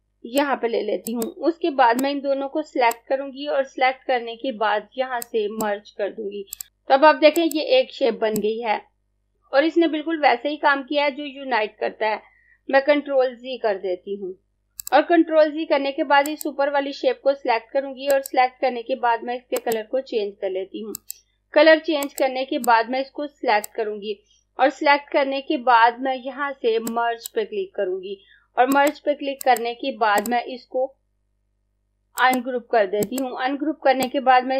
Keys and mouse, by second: 1.1 click, 5.3 click, 6.7 Escape, 7.4 click, 13.0 z, 13.8 ctrl+z, 14.9 click, 26.8 click, 29.9 right click, 31.9 click.